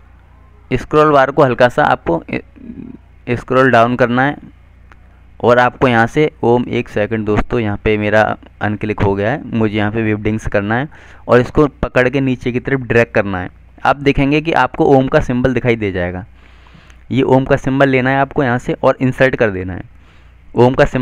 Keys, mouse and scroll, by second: 4.4 scroll up 1, 6.2 click, 8.1 double click, 8.2 click.